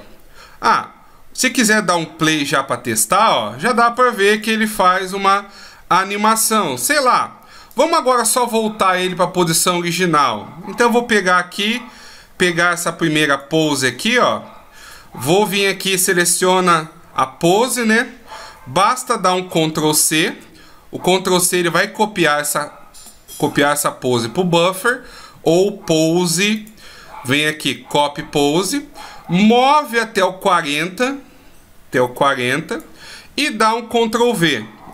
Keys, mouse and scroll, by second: 1.8 click, 2.5 click, 3.9 click, 5.7 click, 7.3 click, 12.9 click, 16.2 a, 16.6 a, 19.9 ctrl+c, 26.1 click, 28.4 click, 29.6 click, 33.9 ctrl+v.